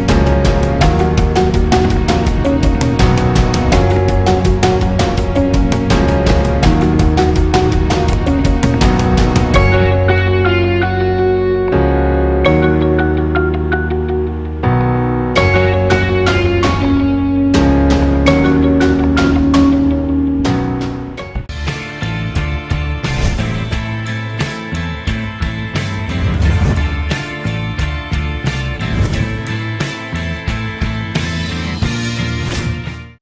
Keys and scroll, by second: 1.1 alt+shift+ä, 1.6 alt+shift+ë, 1.8 alt+shift+´, 2.1 ctrl+alt+×, 2.4 alt+shift+æ, 2.6 alt+shift+ù, 2.7 alt+shift+è, 3.1 alt+shift+ý, 3.4 alt+shift+ê, 3.7 alt+shift+ù, 4.0 alt+shift+´, 4.4 alt+shift+æ, 5.0 alt+shift+ý, 5.3 alt+shift+è, 5.4 alt+shift+i, 5.6 alt+shift+â, 6.0 alt+shift+û, 6.3 alt+shift+´, 7.0 ctrl+alt+ù, 7.2 alt+shift+ì, 7.5 alt+shift+ù, 7.6 alt+shift+ī, 7.9 alt+shift+×, 8.1 alt+shift+ý, 8.3 alt+shift+ç, 8.4 alt+shift+ù, 8.6 alt+shift+´, 9.0 ctrl+alt+â, 9.2 alt+shift+ã, 9.8 alt+shift+å.